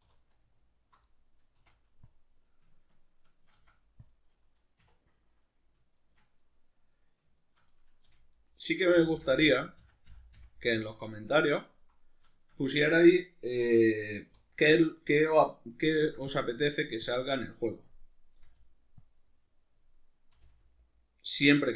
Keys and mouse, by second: 0.0 3, 0.6 alt+right click, 1.1 middle click, 1.6 x, 2.4 right click, 2.7 shift+right click, 2.9 shift+right click, 3.3 shift+right click, 3.5 x, 4.8 2, 5.3 right click, 5.9 shift+right click, 6.4 middle click, 6.9 right click, 7.3 shift+right click, 7.7 middle click, 8.1 f, 8.6 right click, 8.9 f, 10.7-14.6 middle drag, 14.3 3, 14.6 right click, 15.2 middle click, 16.0 ctrl+r, 17.1 click, 17.2-18.4 middle drag, 18.4 r, 19.0 click, 19.2-20.3 middle drag, 20.3 r.